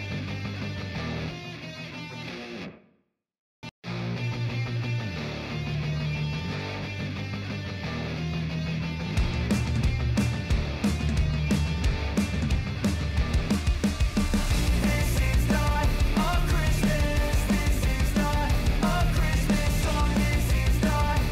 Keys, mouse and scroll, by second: 0.0 click, 3.4-13.7 drag, 14.5 ctrl+alt+Home, 16.8-19.9 drag, 20.7 click.